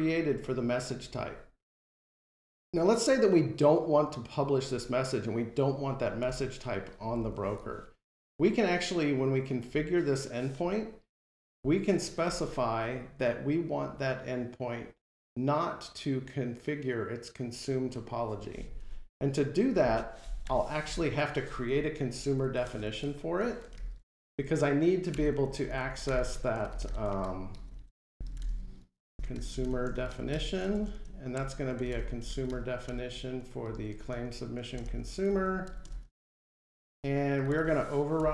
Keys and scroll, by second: 32.7 Return.